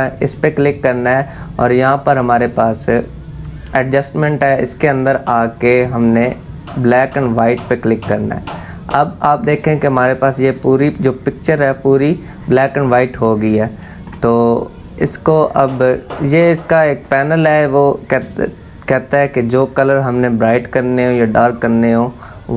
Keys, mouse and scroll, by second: 7.0-12.6 drag, 12.6-15.7 drag.